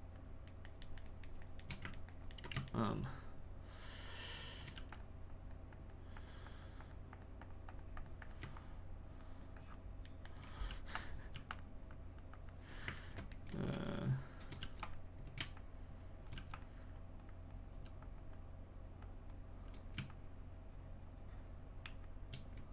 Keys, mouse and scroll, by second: 0.6-4.0 shift+middle drag, 4.0 shift+click, 5.3-10.1 drag, 10.1 shift+middle click, 10.7 f, 11.3 f, 11.9-13.0 drag, 13.0-14.6 ctrl+middle drag, 14.6 f, 15.5 shift+click, 16.3 f, 17.0 click, 17.7 f, 18.3-22.7 drag.